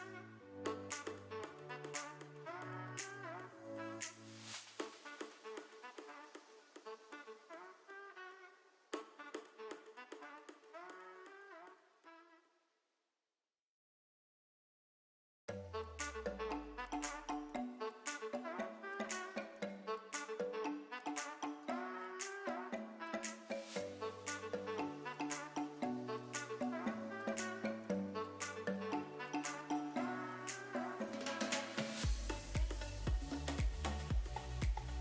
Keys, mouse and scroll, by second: 1.4 click, 4.4-10.7 drag, 12.0 click, 13.8 click, 15.7 click, 18.7 n, 20.0 middle click, 22.4 click, 25.3 f, 27.4-28.3 drag, 28.9-30.0 middle drag, 30.7-31.2 drag, 31.7-32.8 middle drag, 33.7 ctrl+z, 34.6 ctrl+z.